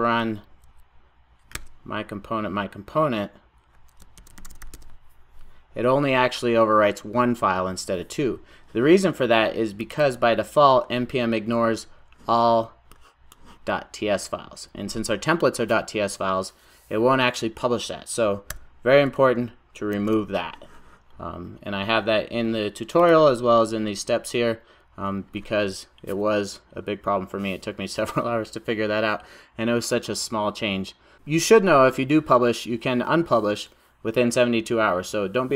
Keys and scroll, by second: 19.9 super+s.